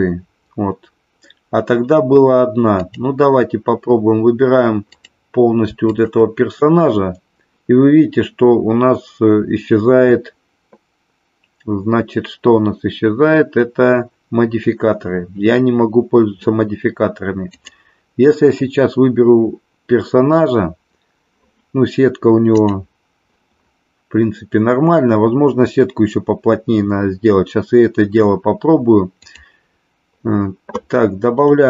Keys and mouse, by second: 2.7 click, 4.8 click, 5.8 shift+click, 17.4 click, 29.4 click, 31.3 click.